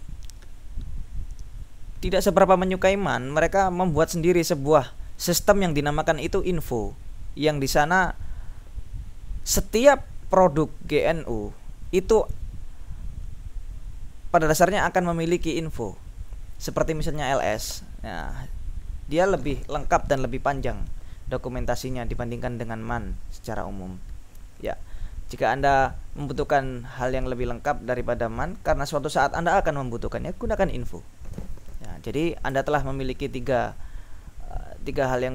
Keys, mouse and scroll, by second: 17.8 Return, 18.7 Down, 21.5 Down, 23.0 Down, 29.7 Down, 32.1 Down, 32.7 q, 33.9 Up, 34.3 Down.